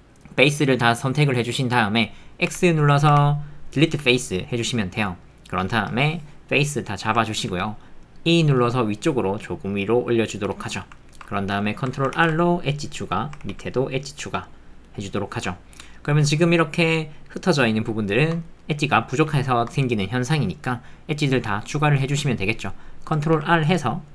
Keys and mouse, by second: 2.5 x, 3.1 x, 5.1 middle click, 6.8 middle click, 7.2 ctrl+middle click, 7.8 middle click, 10.6 middle click, 11.0 ctrl+middle click, 11.1 ctrl+click, 11.3 shift+middle click, 11.6 ctrl+middle click, 13.4 ctrl+r, 14.9 click, 14.9 middle click, 15.1 click, 15.1 middle click, 15.3 click, 15.3 ctrl+middle click, 18.1 shift+middle click, 18.5 middle click, 18.6 click, 18.6 alt+middle click, 19.4 shift+middle click.